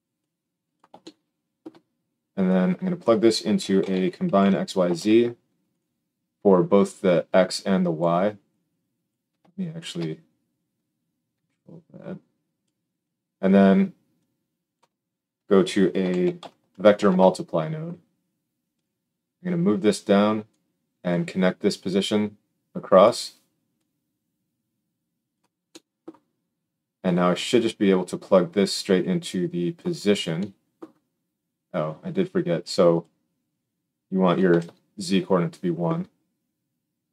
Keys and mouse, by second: 0.9-5.7 shift+middle drag, 5.7-6.9 drag, 6.9 middle click, 10.7-18.8 middle drag, 18.8-19.8 drag, 19.8-30.0 middle drag.